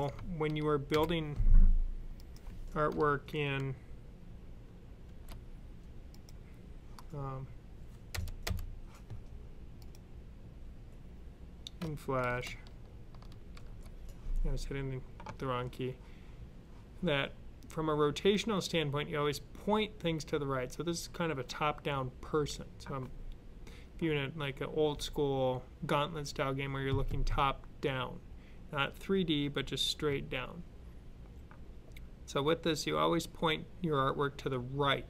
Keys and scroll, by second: 0.8 alt+9, 4.9 9, 13.4 alt+F9.